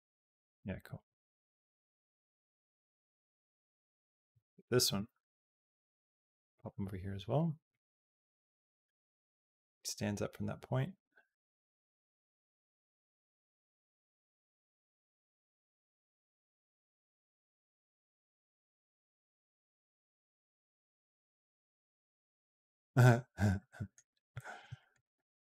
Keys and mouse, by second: 4.7 g, 7.5-15.1 drag, 15.5 middle click, 17.4-22.9 drag, 23.5 middle click, 24.3 middle click, 24.6 shift+middle click, 24.8 middle click, 24.9 click.